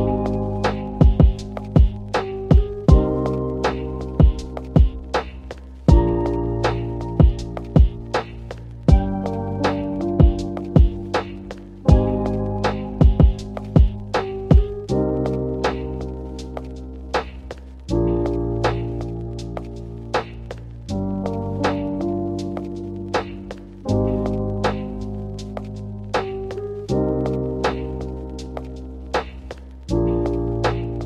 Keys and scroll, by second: 2.5 0, 3.1 ., 3.6 2, 3.8 Return, 5.7 m, 7.6 m, 11.2 k, 12.0 k, 13.9-15.0 typing, 20.2 Escape, 21.2 Left, 21.6-22.1 typing, 22.2 Left.